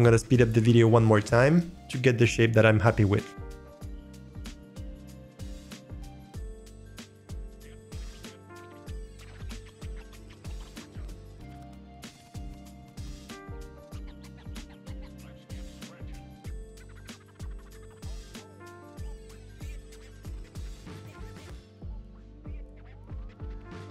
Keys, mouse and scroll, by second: 3.4 middle click, 3.6-8.1 typing, 4.2 middle click, 5.5 middle click, 6.0 middle click, 6.8 scroll up 2, 6.8 shift+middle click, 7.5 click, 7.7 middle click, 8.7 middle click, 8.9 click, 9.1 scroll down 1, 9.2 middle click, 9.4-12.1 typing, 9.6 click, 9.7 scroll down 1, 10.0 middle click, 10.1 click, 10.6 middle click, 10.9 middle click, 11.0 click, 12.0 middle drag, 12.8 click, 12.8 middle click, 12.9 scroll down 2, 13.0 shift+middle click, 13.2 middle click, 13.9 click, 14.0 click, 14.2 click, 14.3 middle click, 14.4 scroll up 2, 14.4 shift+middle click, 14.9 alt+click, 14.9 middle click, 15.2 g, 15.5 shift+d, 15.7 middle click, 15.9 alt+middle click, 15.9 g, 16.5 middle drag, 16.6-17.3 drag, 17.4 click, 18.0 s, 18.4 click, 18.6 shift+middle click, 19.0 middle click, 19.1 scroll up 1, 19.2 scroll down 2, 19.2 click, 19.3-23.9 typing, 19.4 scroll up 1, 19.5 alt+middle click, 20.0 alt+click, 20.8 Delete, 21.2 scroll down 2, 21.4 middle click, 21.8 click, 22.2 ctrl+z, 22.8-23.1 drag, 23.4 alt+middle click.